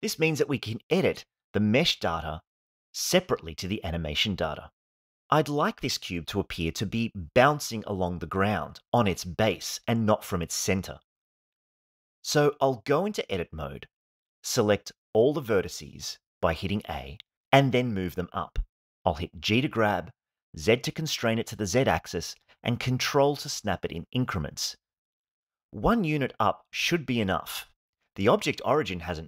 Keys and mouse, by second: 1.3 KP_1, 3.8-4.6 shift+middle drag, 6.3-7.1 shift+middle drag, 13.3 Tab, 14.7 a, 18.9 g, 19.5 z, 23.4 ctrl+click.